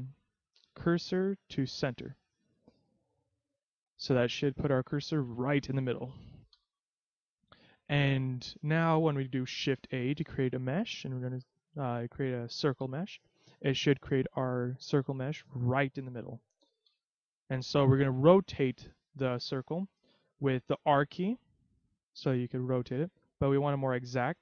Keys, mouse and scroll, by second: 2.4-3.0 scroll up 4, 3.0-4.2 scroll up 2, 4.2 middle click, 5.2 scroll down 1, 6.5 KP_3, 9.9 shift+a, 14.6-15.2 scroll down 1, 15.2 middle click, 15.2 scroll down 2, 16.9 KP_3, 21.2 r.